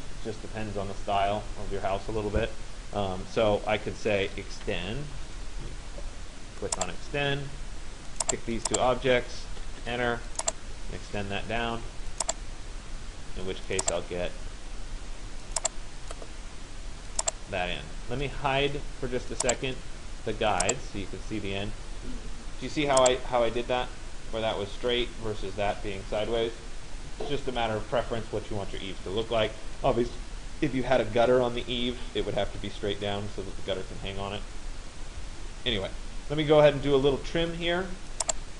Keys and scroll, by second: 9.4 Return.